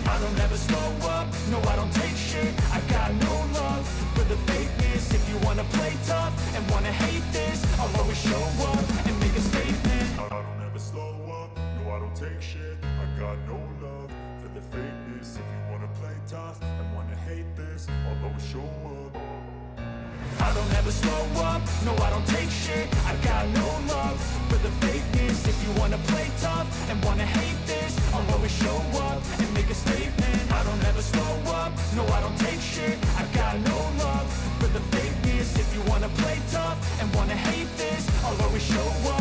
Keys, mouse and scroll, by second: 0.8 click, 1.6 click, 6.4 click, 7.9 click, 9.6 click, 10.1 click, 10.7 click, 11.5-11.9 typing, 13.0 click, 13.9 click, 19.4-20.1 typing, 21.2 click, 26.6 0.